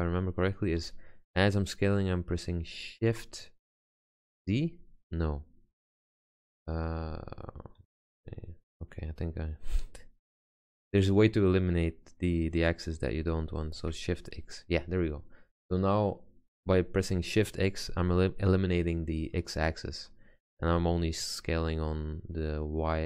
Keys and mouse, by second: 0.9 s, 8.0 ctrl+z, 10.7 s.